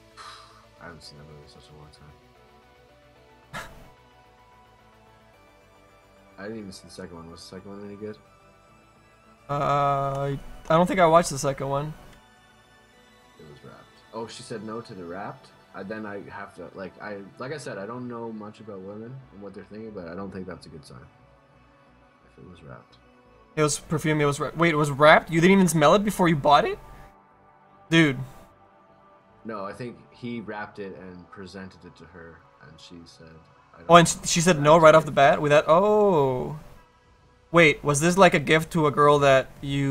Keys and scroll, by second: 7.4 ctrl+z.